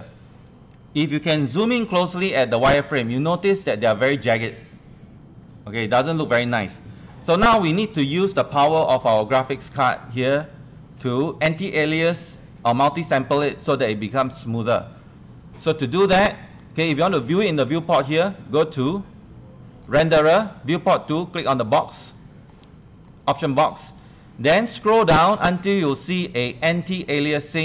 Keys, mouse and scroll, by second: 1.7 ctrl+1, 2.2 scroll up 1, 2.8 click, 7.1 Escape, 7.3 ctrl+1, 19.8 click.